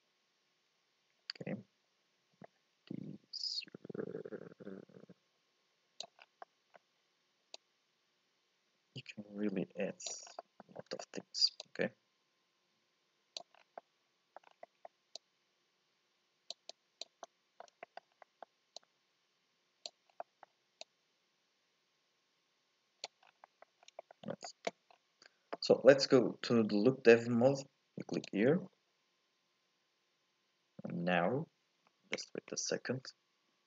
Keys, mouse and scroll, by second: 6.2 scroll down 2, 6.4 middle click, 6.7-7.5 scroll up 2, 7.5-10.2 drag, 10.2 scroll down 1, 10.4 middle click, 10.7 scroll up 1, 11.0 shift+middle click, 11.6-13.5 drag, 13.5 scroll down 1, 13.8 middle click, 14.4 scroll up 1, 14.6 middle click, 15.2-17.2 drag, 17.2 middle click, 18.1 scroll up 1, 18.2 middle click, 18.8-20.1 drag, 20.1 scroll down 1, 20.2 middle click, 20.8-23.2 drag, 23.2 scroll down 2, 23.4 middle click, 23.8 scroll up 1, 24.0 shift+middle click, 24.9-26.1 scroll down 1, 26.1-27.9 scroll down 1, 28.3 click.